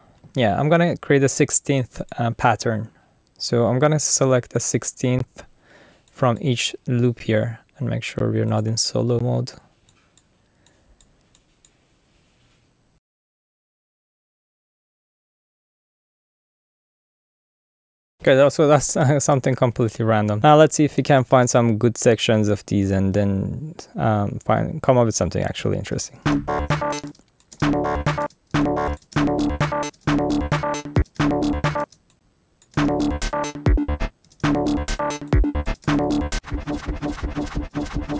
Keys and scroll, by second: 13.0-14.7 typing, 18.2 space, 20.5 space, 26.2 space, 30.2 space, 31.8 space, 33.0 space, 34.2 space, 35.6 space, 36.7-38.1 typing.